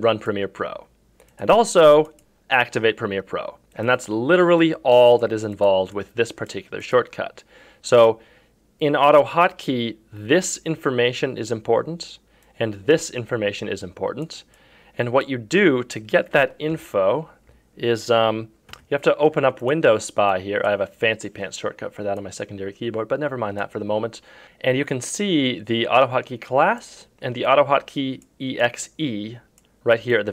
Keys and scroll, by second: 16.7 F3, 18.7 KP_Subtract.